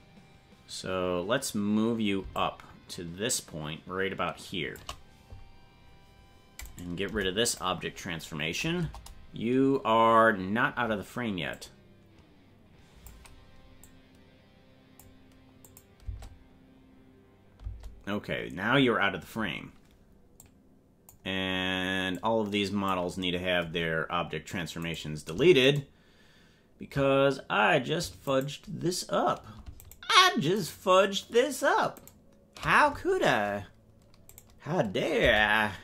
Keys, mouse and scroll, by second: 2.3-4.8 shift+drag, 6.6 right click, 7.1 Delete, 8.8 KP_0, 11.6-13.0 drag, 14.0-15.2 drag, 15.8 click, 16.0 space, 17.7 space, 20.5 click, 22.2 click, 23.7 scroll down 5, 24.8 right click, 25.7 shift+right click, 27.4 scroll up 1, 28.3 shift+right click, 29.8 shift+right click, 30.6 shift+right click, 32.0 shift+right click, 34.2 right click, 35.2 Delete.